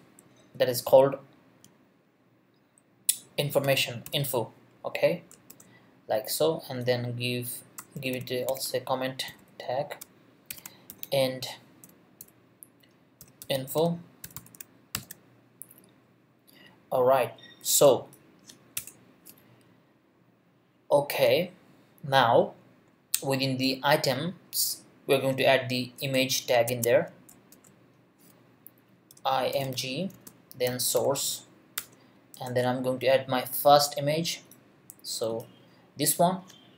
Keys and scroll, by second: 0.0-0.2 typing, 0.4 Return, 3.1-5.5 typing, 4.7 Right, 5.3 shift+Right, 8.0-11.8 typing, 13.0-14.9 typing, 18.8 Return, 26.0 Return, 26.7 Tab, 27.3 shift+Tab, 27.5 shift+,, 28.9-31.6 typing, 31.8 Return.